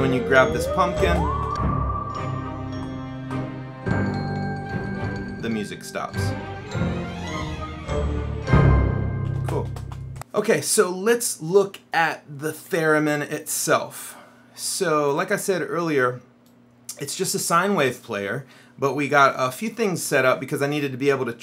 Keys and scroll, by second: 0.0 Up, 1.2 space, 2.8 Down, 3.3 Left, 4.8 Down, 9.4 Up, 9.5 space.